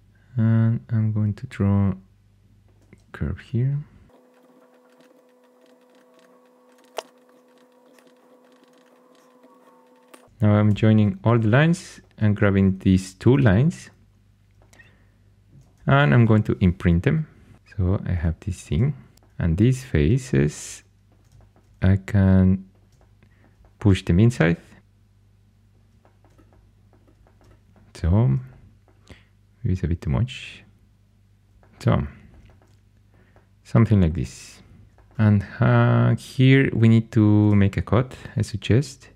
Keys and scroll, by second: 2.9-5.0 typing, 5.1 ctrl+super+c, 6.7-10.6 typing, 16.2 Caps_Lock, 17.5 shift+super+e, 19.1 3, 38.2 ctrl+super+c.